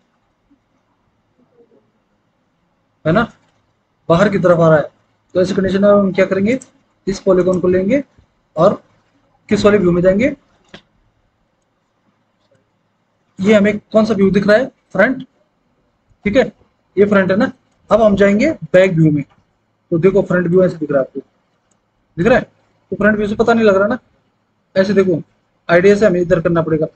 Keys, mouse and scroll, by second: 8.5 alt+w, 16.1 alt+w, 20.7 F4, 20.9 F3, 24.0 F4, 24.3 F3.